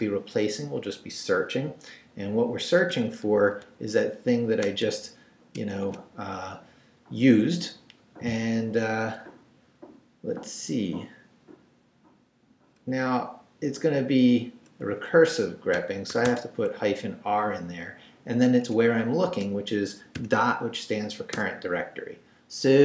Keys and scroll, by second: 2.9 shift+', 3.5 shift+super+v, 4.1 super+v, 4.8 BackSpace, 5.5 shift+BackSpace, 5.8 shift+', 13.0 Left, 14.8 Left, 15.7 -, 16.1 r, 16.2 space, 16.7 Right, 18.7 Right, 19.3 space, 21.3 Return.